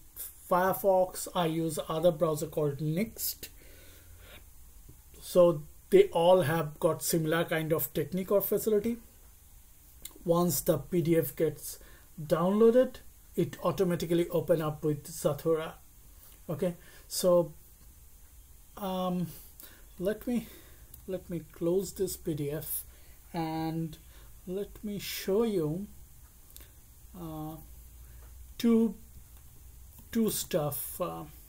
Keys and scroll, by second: 21.7 alt+q, 27.4 alt+1, 29.7-31.4 typing.